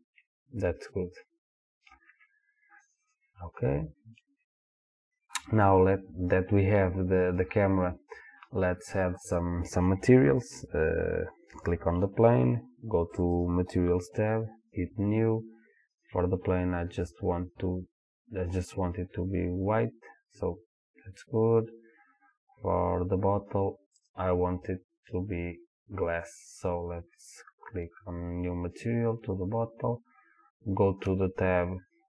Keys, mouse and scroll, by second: 3.7-10.9 middle drag, 10.9 click, 13.4 click, 14.8 click, 15.9 click, 19.9 click, 21.7-22.4 scroll up 1, 24.0 click, 28.0 click.